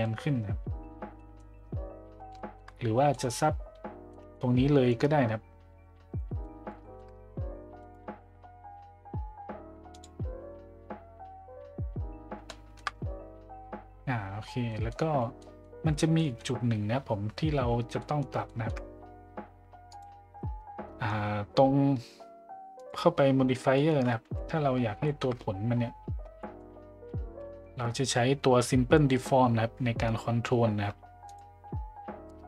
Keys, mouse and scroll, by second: 1.1 middle drag, 2.3 shift+middle drag, 3.1 middle drag, 4.1 middle drag, 6.1 middle drag, 6.1 a, 6.8 shift+middle drag, 9.9 click, 12.4-12.8 shift+middle drag, 14.7 middle click, 15.4 middle drag, 16.2 middle click, 18.0 middle drag, 18.5 shift+middle drag, 19.9-21.3 drag, 22.8 click, 23.8 middle drag, 25.0 shift+middle drag, 26.4 middle click, 28.0-31.5 drag.